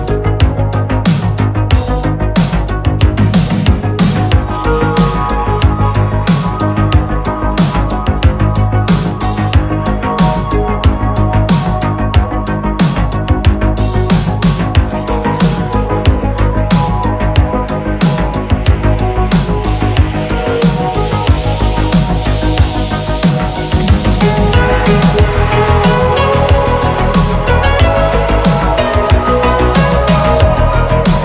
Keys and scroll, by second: 2.9 ctrl+z, 7.6 ctrl+z, 9.1 ctrl+z, 9.6 ctrl+z, 10.1 space, 20.8 ctrl+z, 25.9 space.